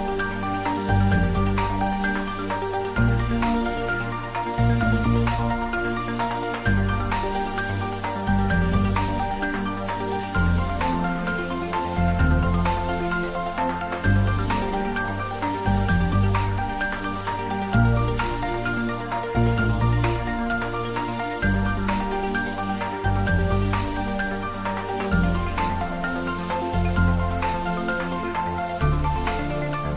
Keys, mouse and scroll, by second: 0.9 click, 1.1 s, 1.7 click, 2.0 e, 3.5 click, 3.8 s, 4.3 click, 5.4 r, 5.9 click, 6.1 s, 6.4 click, 6.6 w, 7.5 click, 8.0 ctrl+z, 11.1 click, 11.2 e, 11.7 ctrl+z, 13.0 click, 13.4 ctrl+z, 14.8 r, 15.2 click, 15.6 g, 16.2 click, 16.7 Tab, 18.2 click, 18.6 shift+z, 18.9 click, 20.4 shift+z, 21.2 e, 23.8 click, 24.2 Tab, 24.6-25.8 middle drag, 25.8 ctrl+w, 26.1 middle click, 26.4 Tab, 26.6 middle click, 27.3 e, 28.1 click, 28.3 ctrl+z, 28.8 click, 29.7 e.